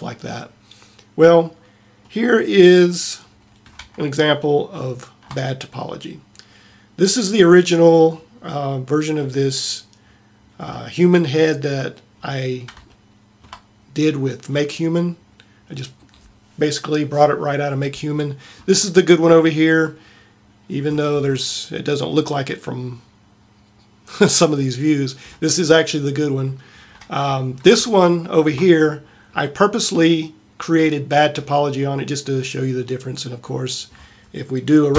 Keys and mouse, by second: 21.9-22.6 middle drag, 26.5-27.5 middle drag.